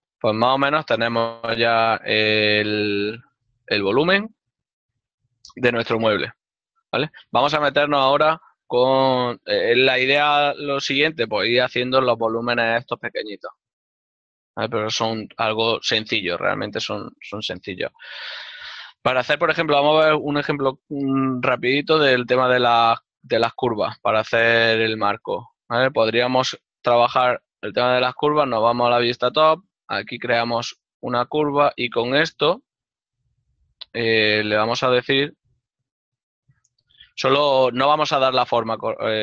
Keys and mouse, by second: 1.0 z, 3.4 middle click, 3.6 Tab, 5.0 ctrl+middle click, 5.4 middle click, 5.9 shift+middle click, 22.8 click, 25.4 click, 26.3 7, 28.4 shift+middle click, 28.8 click, 28.8 a, 32.0 shift+middle click, 33.8 Tab, 34.6 click, 36.8 click, 37.4 n.